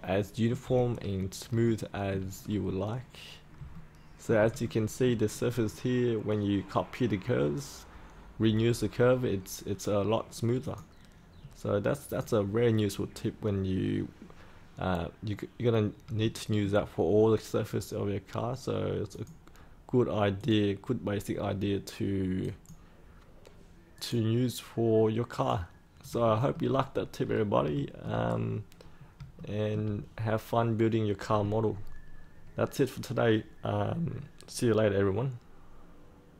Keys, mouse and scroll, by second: 0.8-1.4 scroll up 1, 1.6 shift+middle click, 2.3-3.5 scroll down 1, 3.7 alt+middle click, 4.6 shift+middle click, 5.5-6.1 scroll down 1, 10.6 click, 11.2 scroll up 1, 12.0 click, 16.1 shift+middle click, 19.0 click, 23.9 right click, 25.2 click, 26.2 shift+middle click, 26.8-27.2 scroll up 1, 27.2 scroll down 1, 27.7 shift+middle click, 28.2-28.7 scroll down 1, 28.7-29.1 scroll up 1, 29.3 shift+middle click, 30.0-32.7 scroll up 1, 33.1-36.3 scroll down 1, 36.3 1.